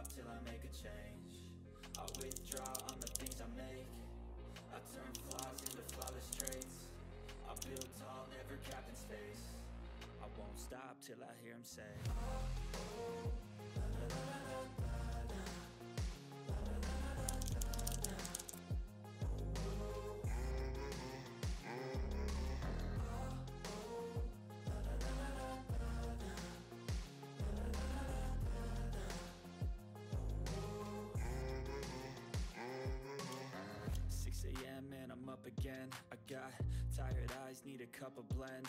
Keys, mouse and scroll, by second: 0.8 click, 1.7-3.7 typing, 3.9 click, 5.0-7.7 typing, 7.1 click, 8.3 click, 8.7 ctrl+scroll down 1, 10.0 click, 11.8 click, 13.3 right click, 14.3 click, 16.4 click, 17.1-18.9 typing, 19.5 Return, 19.5 scroll down 1, 20.4 click, 23.1 click, 23.8 click, 24.2 scroll down 1, 27.6 scroll down 1, 29.3-29.6 scroll up 2, 29.6 click, 31.8 click, 33.3 ctrl+scroll up 1, 33.6 ctrl+middle click, 34.1 ctrl+scroll up 1, 34.5-38.6 drag.